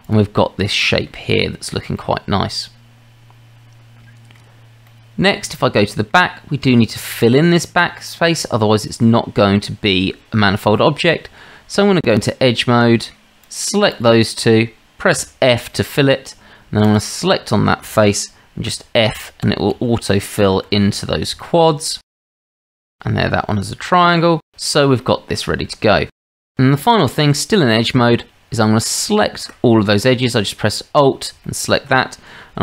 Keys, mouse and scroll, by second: 1.4-2.0 shift+middle drag, 3.8-4.4 middle drag, 4.9-5.6 middle drag, 5.7-6.1 middle drag, 7.3-8.2 middle drag, 10.8-11.2 middle drag, 11.3 Tab, 13.4 click, 13.9 shift+click, 15.2 f, 15.7-16.0 drag, 18.7-20.9 typing, 20.1-20.4 drag, 21.4-22.0 shift+middle drag, 22.3 f, 22.6 f, 24.5 shift+middle drag, 25.0 click, 26.4 shift+middle click, 26.6 Tab, 28.8 alt+click, 31.5-31.9 shift+middle drag.